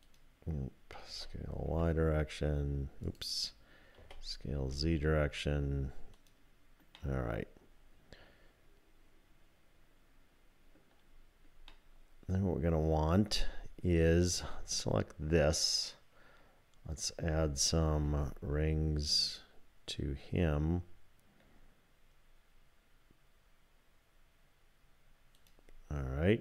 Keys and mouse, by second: 1.1 s, 4.0 s, 7.0-10.8 middle drag, 11.7-13.2 middle drag, 14.2 click, 17.8 ctrl+r.